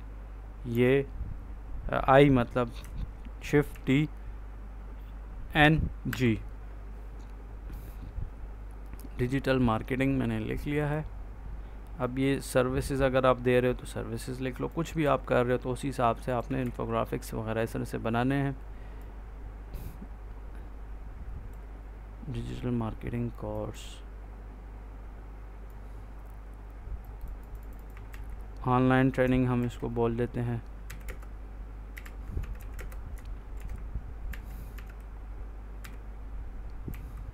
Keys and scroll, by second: 0.6 i, 3.6 shift+t, 5.5 n, 6.0 g, 14.9 ctrl+s, 16.5 ctrl+s, 28.0 ctrl+a, 29.5 shift+a, 30.7-34.6 typing, 35.7 n, 36.8 g.